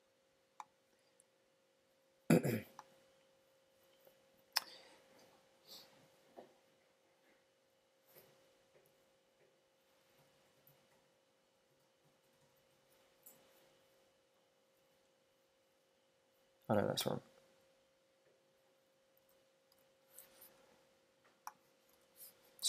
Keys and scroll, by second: 17.0 super+r, 19.2 super+Tab.